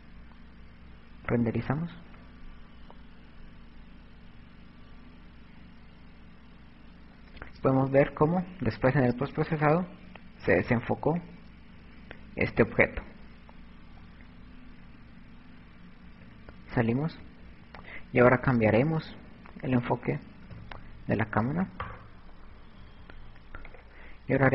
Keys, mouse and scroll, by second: 12.2 Escape, 19.1 KP_7, 22.1 right click, 23.8 click.